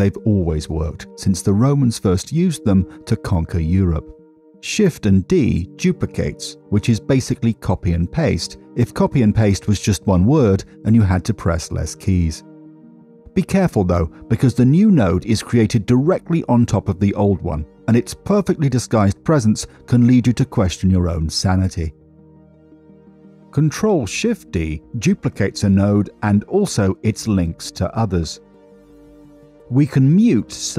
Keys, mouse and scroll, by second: 0.3 ctrl+v, 1.4 ctrl+v, 2.1 drag, 3.6 ctrl+x, 5.4 middle click, 8.5 click, 9.1 shift+d, 11.7 click, 13.0 shift+d, 18.8 click, 23.2 middle click, 23.9 middle click, 26.9 click, 27.4 ctrl+shift+d, 28.7 click, 30.2 middle click.